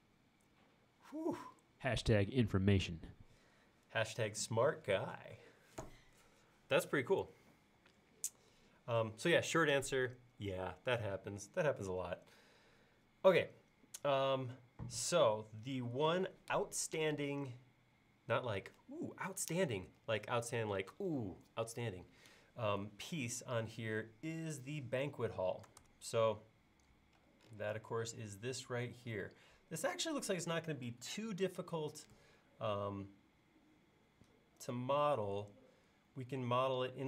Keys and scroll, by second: 25.8 super+Tab.